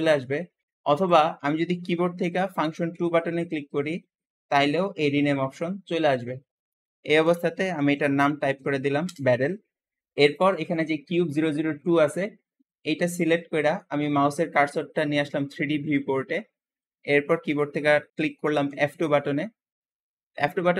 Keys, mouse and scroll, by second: 0.9 click, 2.8 F2, 7.7 r, 10.1 click, 18.6 F2.